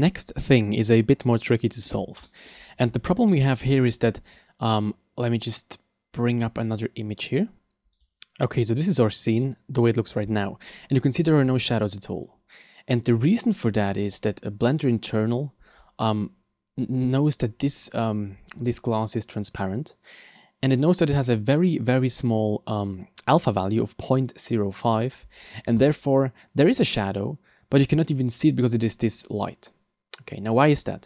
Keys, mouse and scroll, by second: 2.3 middle click, 2.6-3.5 scroll down 8, 3.4 shift+middle click, 3.8 middle click, 4.4 right click.